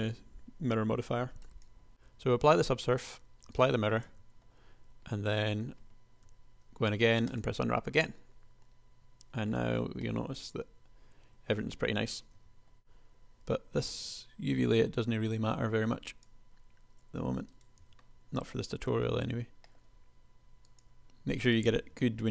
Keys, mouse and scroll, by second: 4.4 Tab, 6.3 u, 9.9 Tab, 12.6 KP_1, 12.8 l, 13.7 g, 18.2 l, 19.1 g, 22.2 l.